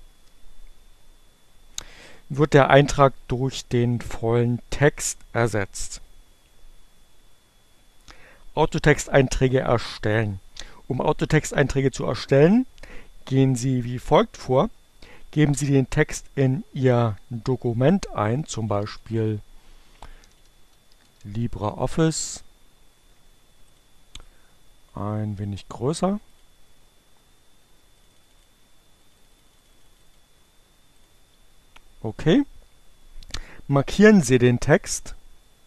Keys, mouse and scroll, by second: 7.3 Return, 17.5-21.0 typing, 22.0 ctrl+a, 23.5 click, 23.9 click, 26.1 click, 27.7 click, 28.2-29.9 drag, 30.7 click, 33.5 click, 34.2-35.6 drag.